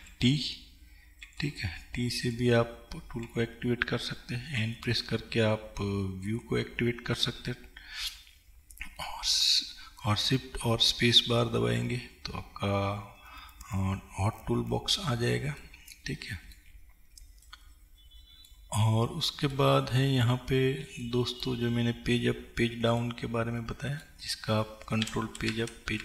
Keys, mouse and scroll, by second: 4.6 n, 15.9-25.1 middle drag, 17.0-17.5 scroll down 2, 25.2 ctrl+Page_Down, 25.6 ctrl+Page_Up.